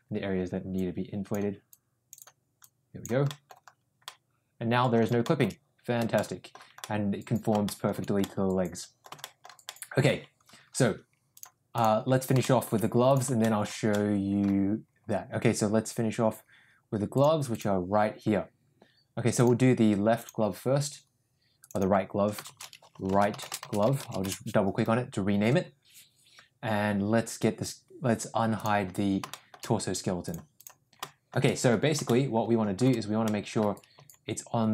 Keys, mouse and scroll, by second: 0.7 click, 1.7 click, 2.2 click, 2.6 click, 3.3 middle click, 4.0 middle click, 5.2 shift+middle click, 6.1 shift+middle click, 6.7 middle click, 7.6 shift+middle click, 8.1 middle click, 9.1 shift+middle click, 9.6 shift+middle click, 11.2 click, 12.3 shift+middle click, 13.3 shift+middle click, 13.9 middle click, 14.1 middle click, 17.1 click, 17.4 click, 19.3 click, 21.7-24.6 drag, 28.5 click, 29.2 shift+middle click, 30.2 click, 30.5 click, 30.9-31.2 shift+middle drag, 32.0-32.7 shift+middle drag, 33.2-33.5 middle drag, 33.9 g.